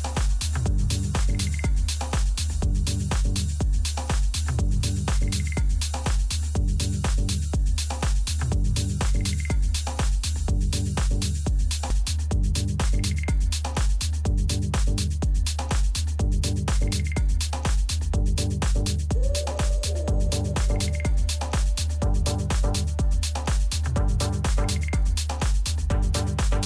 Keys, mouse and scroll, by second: 2.6-7.6 middle drag, 7.9 ctrl+z, 8.6-10.5 middle drag, 12.7-14.6 middle drag, 13.2 a, 14.8-22.2 middle drag.